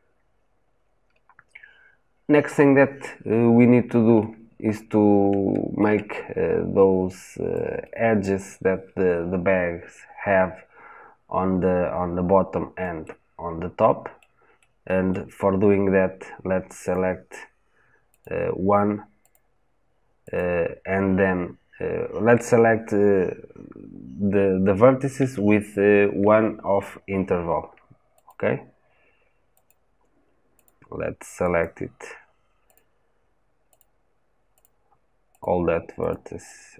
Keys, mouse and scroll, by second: 3.3 scroll up 1, 4.0-8.0 shift+middle drag, 8.0 click, 12.8-16.7 shift+middle drag, 16.7 shift+click.